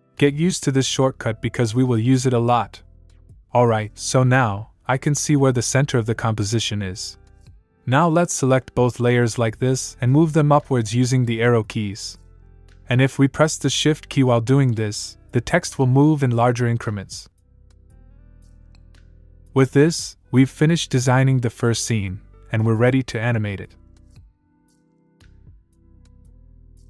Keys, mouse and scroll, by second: 7.2 click, 10.5 Up, 13.8 shift+Num_Lock, 14.5 shift+Up, 17.2 shift+Down, 21.6 click.